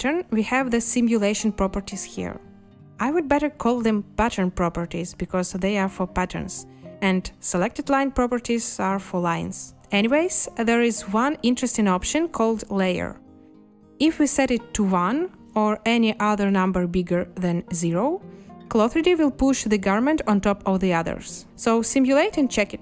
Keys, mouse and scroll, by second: 21.4 space.